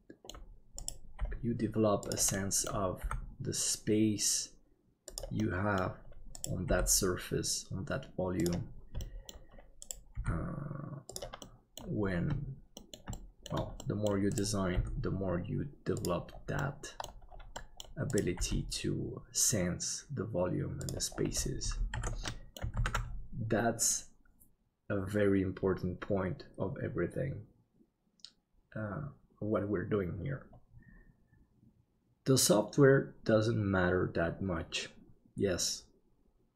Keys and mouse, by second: 1.2 g, 2.4 middle click, 3.0 g, 5.6 middle click, 6.4-8.5 right drag, 9.2 middle click, 10.2 g, 11.6 middle click, 12.9 middle click, 13.3 shift+middle click, 13.9 middle click, 14.7 g, 16.8 middle click, 17.5 middle click, 18.4 g, 22.0 alt+a, 22.3 middle click, 23.0 ctrl+s.